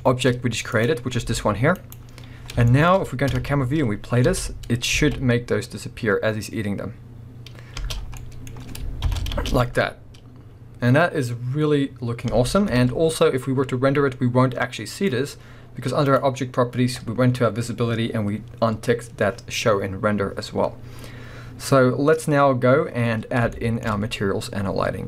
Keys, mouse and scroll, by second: 0.0-0.7 shift+middle drag, 0.3-0.7 scroll up 1, 0.7 click, 1.2 g, 1.9 right click, 2.4 scroll down 1, 2.7-3.3 shift+middle drag, 3.3 KP_0, 3.9 scroll up 2, 4.2 space, 4.3 middle click, 4.8 scroll up 1, 5.0 alt+a, 7.9 space, 8.0 scroll down 1, 8.2 middle click, 9.1 shift+Left, 9.3 space, 12.3 space, 12.7 KP_0, 13.5-15.0 scroll up 2, 15.0 click, 16.1-18.6 drag, 19.8 scroll up 1, 23.5-24.9 shift+middle drag, 23.9-24.7 scroll up 1.